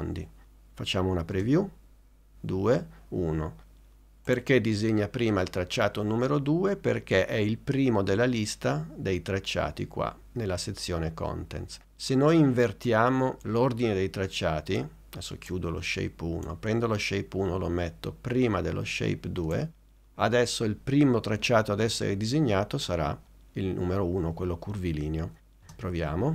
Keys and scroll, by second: 1.4 space, 25.7 space.